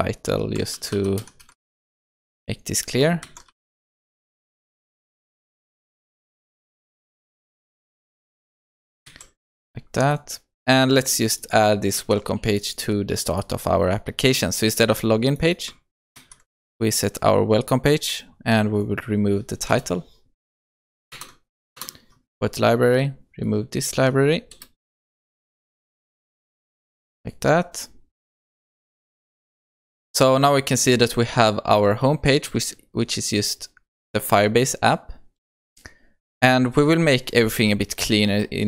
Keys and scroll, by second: 9.2 ctrl+s, 11.9 ctrl+c, 16.1 ctrl+v, 21.1 alt+Return, 26.8 ctrl+s, 30.4 shift+F10.